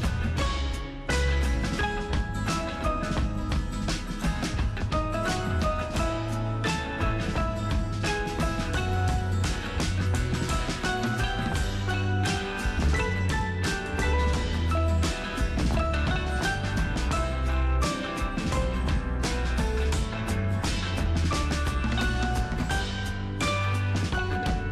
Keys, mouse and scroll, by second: 5.3 super+Return, 7.2-8.4 super+scroll up 1, 8.5-9.8 super+drag, 11.4-16.7 super+drag, 19.0 alt+super+scroll up 1, 20.6 super+scroll down 1, 22.1 super+click.